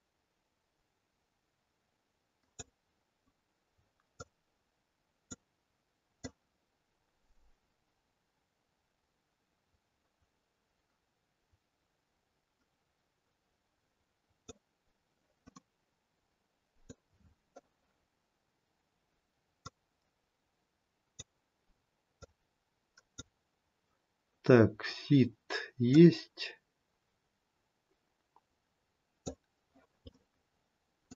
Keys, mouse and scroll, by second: 4.1 click, 6.1 click, 15.5 middle click, 19.6 click, 22.1 click, 25.8 click, 30.2 middle click.